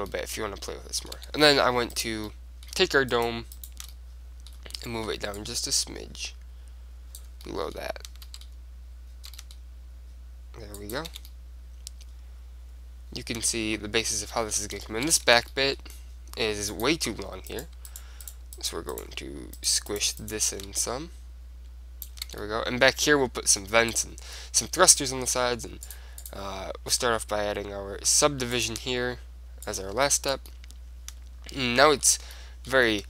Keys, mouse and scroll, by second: 1.4 Tab, 2.1 click, 5.3 middle click, 5.7-7.4 drag, 7.6-10.3 middle drag, 9.4 s, 11.0-12.9 drag, 11.3 Tab, 11.9 middle click, 12.9 middle click, 13.8-17.7 middle drag, 15.4 Tab, 16.9-18.8 drag, 17.7-22.0 right drag, 20.9-22.8 drag, 22.6 Tab, 22.8-27.8 middle drag, 26.0-28.0 drag, 29.7-31.5 drag, 30.2 middle click, 30.8 right click, 31.5 middle click, 32.5 middle click.